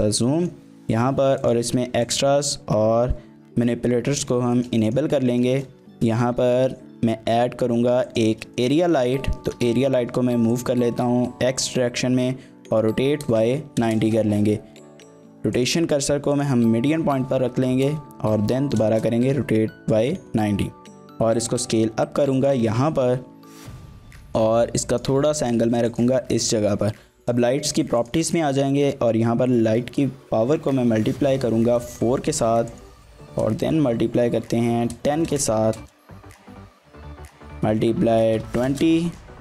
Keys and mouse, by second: 0.3 middle drag, 1.4 click, 2.0 click, 3.4 t, 4.6 shift+middle click, 4.9 middle click, 5.4 shift+middle click, 5.5 middle click, 5.8 shift+a, 8.6 shift+click, 8.8 click, 9.4 g, 9.7 x, 10.5 click, 12.2 r, 12.7 y, 13.0 KP_9, 13.2 KP_0, 13.8 KP_Enter, 14.8 ctrl+z, 15.6-16.5 drag, 17.1 r, 17.3 y, 17.7 KP_9, 18.4 KP_Subtract, 18.4 KP_0, 18.9 KP_Enter, 20.7 s, 22.4 click, 23.1-25.6 typing, 24.3 click, 24.9 click, 25.4 click, 25.9 click, 27.2 drag, 28.1-39.4 drag.